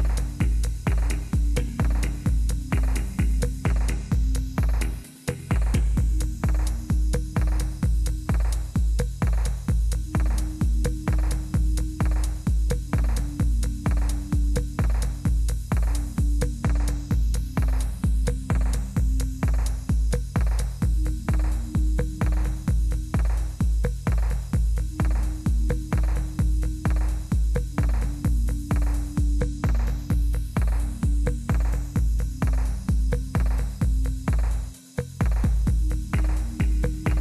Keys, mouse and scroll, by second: 3.3 /, 7.4 Return, 8.9 Return, 18.0 Down, 18.7 Up, 19.3 Return.